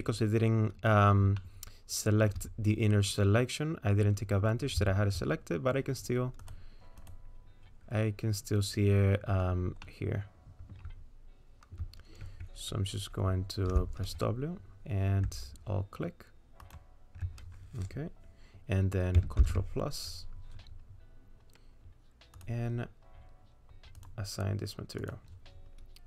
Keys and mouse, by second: 1.4 shift+middle click, 9.8 middle click, 13.7 w, 16.6 alt+click, 19.4 ctrl+KP_Add, 22.4 click, 24.0 click.